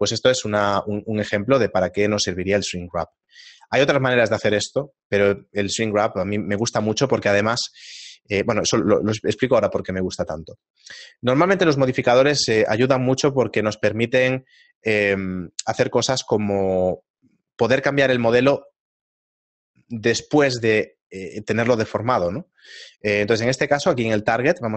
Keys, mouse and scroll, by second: 2.0 shift+middle click, 24.5 click.